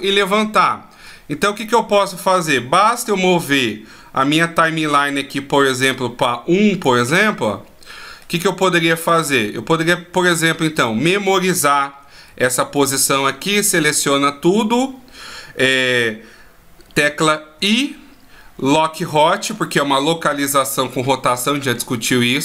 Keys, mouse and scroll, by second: 2.2 click, 7.0 middle click, 8.7 middle click, 11.9 a, 12.3 a, 17.2 i.